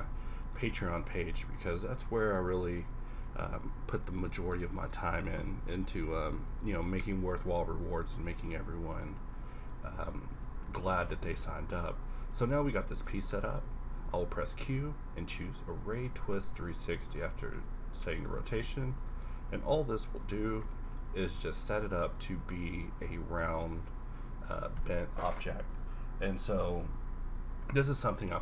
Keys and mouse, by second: 0.0 x, 1.4 ctrl+Tab, 3.2 g, 5.1 g, 6.6 Tab, 8.2 Tab, 9.1 Tab, 10.1 Tab, 11.3 Tab, 14.0 q, 16.4 ctrl+a, 18.4 a, 19.1 click, 19.4 q, 20.5 middle drag, 22.3-24.5 middle drag.